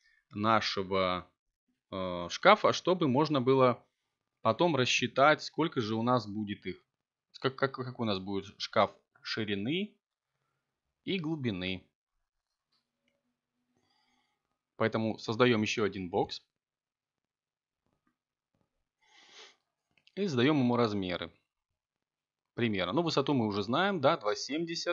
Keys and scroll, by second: 13.9 2, 15.4 ., 15.9 7, 17.3 BackSpace, 19.1 ., 19.7 7, 21.3 Return.